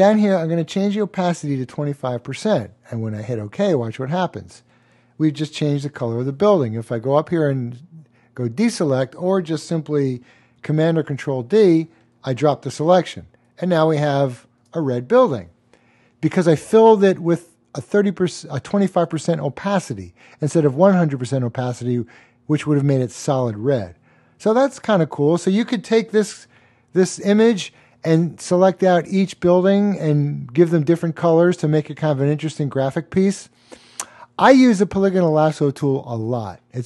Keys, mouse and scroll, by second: 1.1-2.0 typing, 3.3 click, 7.2 click, 10.9 super+d, 13.0-14.3 typing, 13.6 click, 26.1 alt+space, 26.4 click, 26.6-27.0 typing.